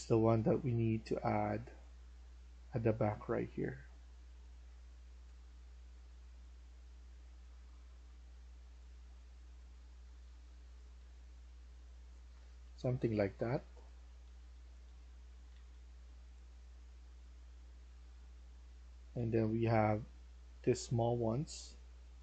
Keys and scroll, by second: 0.1 d, 8.8-15.9 typing, 13.3 Escape, 17.7-19.5 typing.